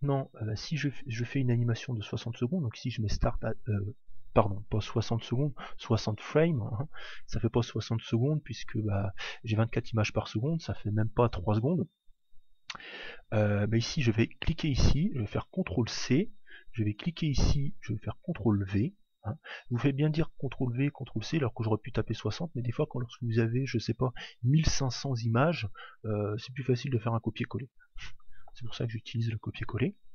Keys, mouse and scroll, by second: 14.5 click, 17.2 click.